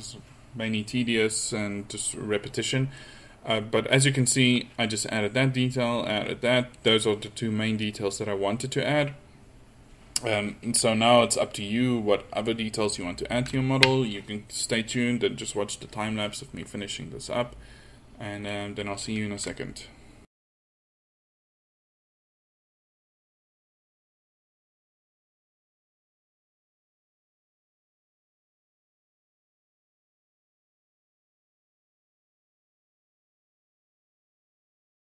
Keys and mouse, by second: 3.9 middle drag, 20.6-24.6 middle drag, 21.4 click, 27.2 middle click, 28.5 ctrl+z, 28.7 f, 29.9 middle drag, 31.3 middle drag, 31.5 f, 33.4 ctrl+z, 33.5 f.